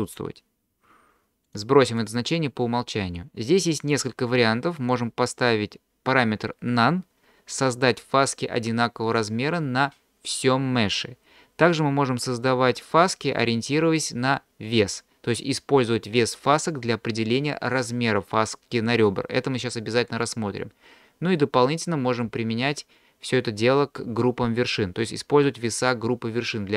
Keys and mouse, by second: 1.6 click, 3.9-26.7 drag.